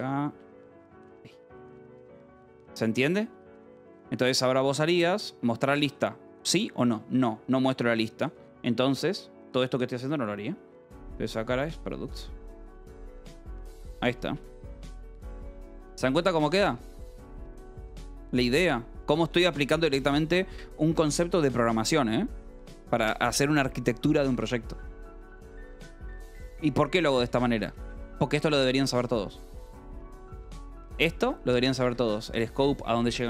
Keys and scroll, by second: 0.8 ,, 2.0 ,, 2.2 Escape, 2.3 k, 3.6 d, 4.0 j, 5.1 l, 5.7 l, 6.3 l, 8.4-9.4 typing, 11.5 p, 12.9 Escape, 13.4-16.8 typing, 16.2 Escape, 18.0 k, 19.0-20.9 typing, 19.8 Escape, 21.5 ctrl+s, 26.6 j, 27.7 k, 30.2 j, 31.8 Escape.